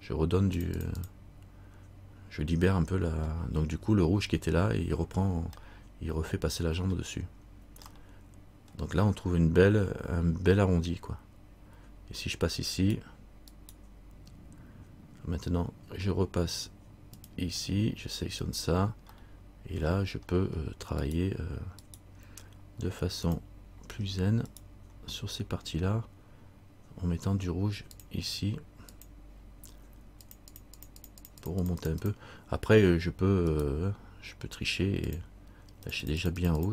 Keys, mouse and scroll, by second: 3.4-4.3 scroll down 1, 5.8 middle click, 6.8 middle click, 8.1 middle click, 12.9 right click, 17.3 click, 18.6 right click, 19.3 middle click, 20.5-21.2 scroll up 1, 21.2 right click, 23.4 click, 24.6 right click, 28.1 click, 30.4-31.3 click, 31.4 click, 33.7 right click, 35.2-36.7 click.